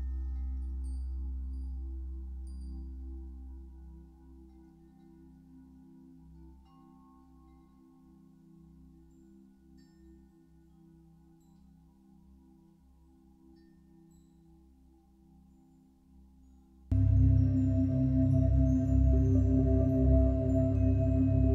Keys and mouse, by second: 4.0 ctrl+alt+click, 5.6 click, 7.1 click, 8.0 Delete, 10.5-12.6 drag, 13.0-17.9 ctrl+alt+drag, 19.8-21.5 drag.